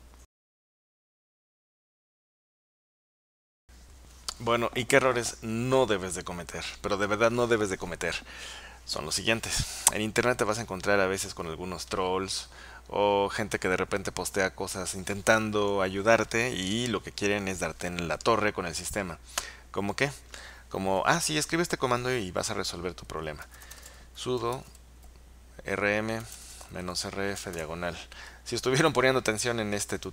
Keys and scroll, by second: 23.3-27.6 typing.